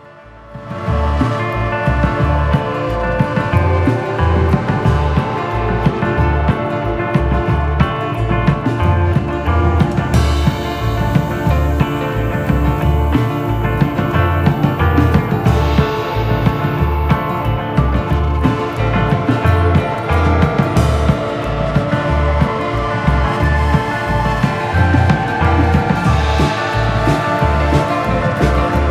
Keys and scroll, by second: 7.5 super+c, 7.8 super+f, 8.3 shift+Right, 12.0 a, 14.2 shift+Up, 17.8 shift+Down, 21.1 super+c, 21.9 super+f, 22.4 shift+Right, 23.5 super+c, 23.7 super+f, 24.1 shift+Right, 25.8 a, 27.4 shift+Down.